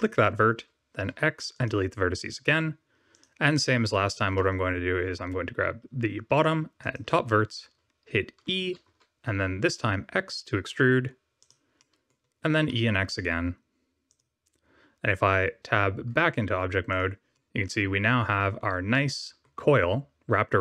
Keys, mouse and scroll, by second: 1.0 x, 3.1 click, 3.5 middle click, 6.7 shift+click, 7.2 scroll down 3, 8.8 e, 11.7 middle click, 12.7 e, 16.4 Tab, 16.8 click, 17.3 middle click, 18.9 middle click.